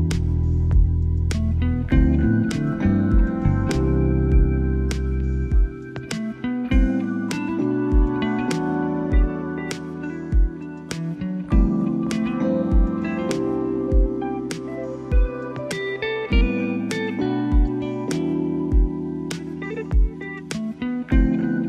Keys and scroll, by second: 4.0 ctrl+j.